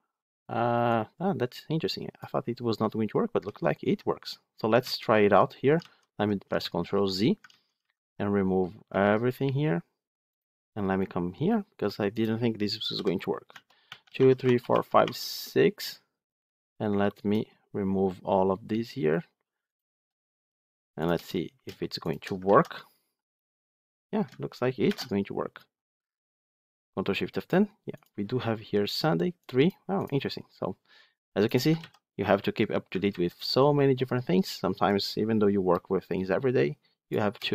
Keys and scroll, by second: 3.3 ctrl+z, 5.6 ctrl+z, 7.3 ctrl+z, 22.3 ctrl+x, 24.7 ctrl+shift+F10, 31.7 ctrl+z, 32.9 ctrl+z.